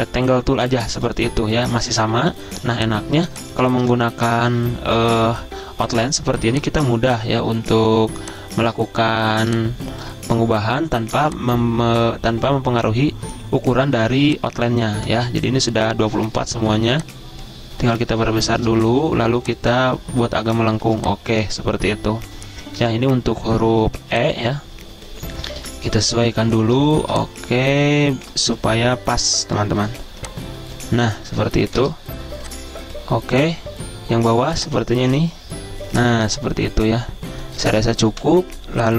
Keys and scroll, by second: 2.7 z, 3.8 v, 11.2 z, 14.9 v, 18.1-19.4 typing, 20.9 z, 22.8 v, 24.0 z, 25.6 v, 29.6 a, 31.8 v, 36.1 z, 38.1 v.